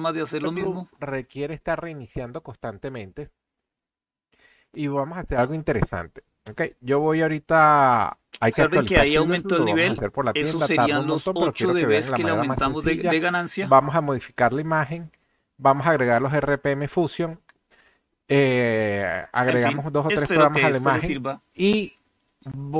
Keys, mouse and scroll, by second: 0.0 click, 22.7 click.